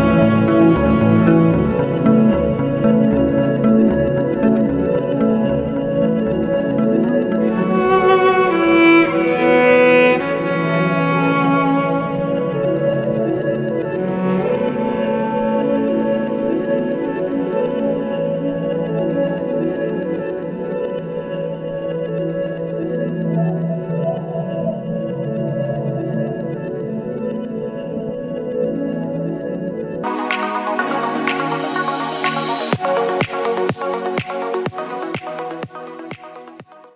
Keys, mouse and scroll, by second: 1.9 alt+h, 2.7 scroll up 2, 3.4 click, 3.9 KP_1, 5.0 drag, 6.3 g, 12.5-13.3 middle drag, 13.3-14.0 scroll up 6, 14.0-19.7 middle drag, 21.1 click, 21.7-24.5 drag, 27.2 click, 29.9-31.1 drag.